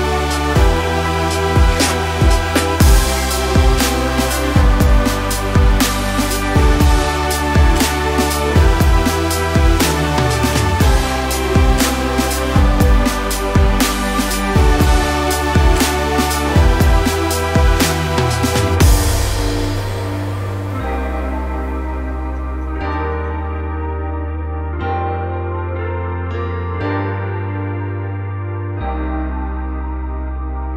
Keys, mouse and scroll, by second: 0.4 ctrl+r, 1.5 k, 4.4 a, 4.8 3, 5.4 i, 6.9 click, 7.3 ctrl+i, 8.0 x, 8.9-10.0 middle drag, 9.4 a, 10.0-12.5 drag, 12.0 KP_Enter, 12.6 click, 13.0 click, 13.2-14.9 middle drag, 13.9 Tab, 14.4 shift+n, 14.6 Tab, 14.9 shift+click, 15.3 ctrl+j, 15.5 click, 15.7-18.5 middle drag, 18.5 click, 18.7 middle drag, 19.0 click, 19.1 Tab, 19.5 click, 19.8 shift+d, 20.0 Return, 20.6 click, 20.9 Tab, 23.8 Escape, 24.1 ctrl+r, 25.2 click, 25.3 ctrl+r, 25.9 Escape, 26.9 ctrl+r, 27.5 Escape, 27.8 click, 28.2 2, 28.2 click, 28.4 shift+click, 28.6 shift+click, 28.9 ctrl+x, 29.6 a.